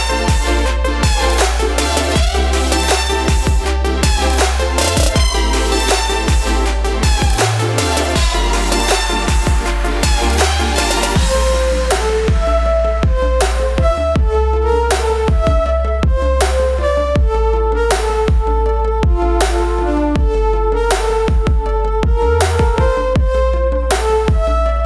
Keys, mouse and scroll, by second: 2.4 space, 2.7 ctrl+click, 3.9 space, 4.2 ctrl+click, 5.2 v, 5.7-10.2 drag, 6.7 typing, 12.5 ctrl+g, 14.9 shift+click, 16.2 ctrl+g, 18.4 click, 20.1 right click, 21.0-24.8 drag.